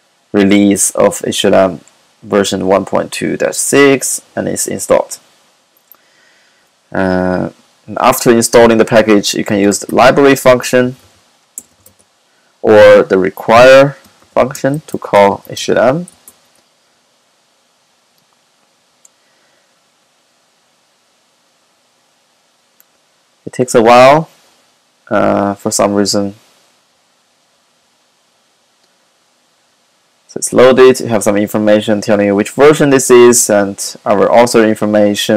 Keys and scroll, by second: 9.5-11.7 typing, 14.3-15.9 typing, 14.5 Left, 18.5-19.3 typing.